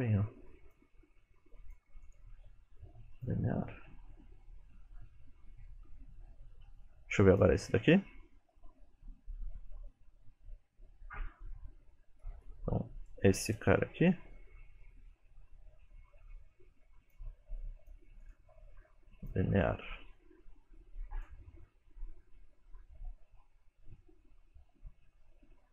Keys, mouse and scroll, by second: 0.6 click, 1.6 click, 2.3 right click, 4.0 space, 6.8 space, 7.4 click, 8.6 click, 12.5 click, 13.6 click, 14.9 middle click, 16.0 middle click, 17.1 click, 17.7 click, 18.3 right click, 19.7 middle click, 20.9 click, 21.4 space.